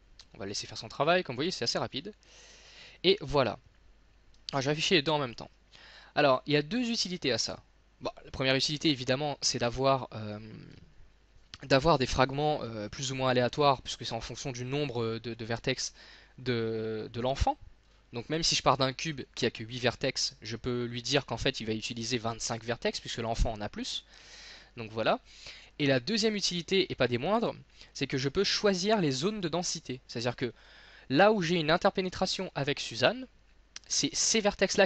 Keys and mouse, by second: 1.3-3.1 drag, 3.1 z, 8.7-13.3 middle drag, 14.1-15.8 middle drag, 17.9-25.3 middle drag.